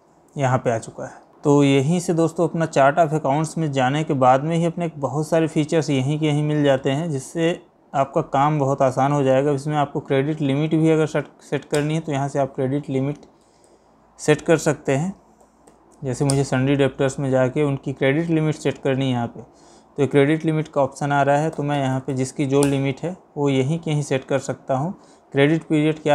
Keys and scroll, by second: 1.3 Escape, 1.7 Escape, 8.5 Down, 13.5 Down.